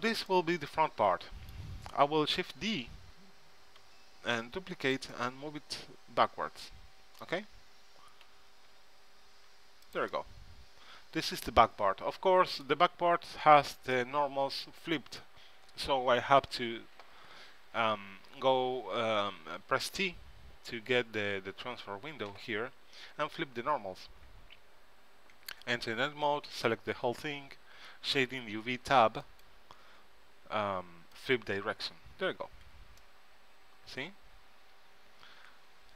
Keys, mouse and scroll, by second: 2.7 shift+d, 8.4 g, 12.0 middle click, 14.1 middle click, 16.5 t, 25.5 Tab, 26.6 a, 26.8 a, 29.4-33.0 drag, 32.8 Tab.